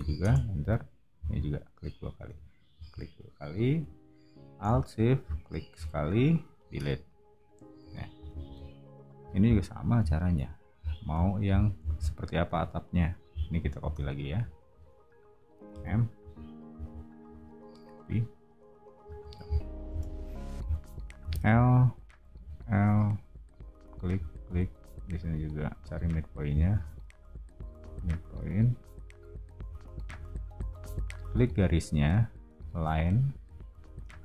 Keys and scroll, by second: 0.0-0.2 typing, 2.2 space, 6.8 BackSpace, 7.8 o, 13.7 space, 15.6 m, 19.9 space, 21.2 l, 26.7 Escape, 30.1 space.